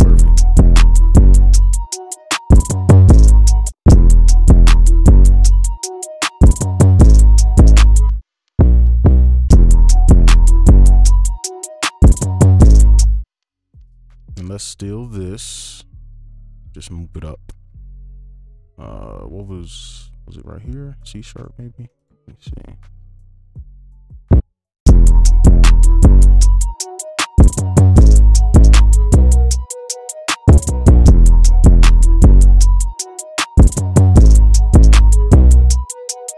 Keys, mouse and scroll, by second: 3.7 space, 3.8 space, 4.3 ctrl+click, 4.6-5.0 alt+scroll down 4, 5.0 right click, 8.0 space, 9.4 space, 13.0 space, 13.6 ctrl+click, 16.5 ctrl+click, 16.8 ctrl+Left, 16.8-18.3 shift+Up, 19.9 shift+Up, 20.0 shift+Down, 21.3 right click, 21.9 ctrl+click, 22.2 shift+Down, 22.4 shift+Down, 22.7 shift+Down, 22.9-23.6 shift+Down, 24.5 right click, 24.8 space, 27.7 right click, 30.6 ctrl+click, 31.1-31.8 alt+scroll up 7, 31.8 right click, 34.4 ctrl+a, 34.6 ctrl+q, 35.0 right click.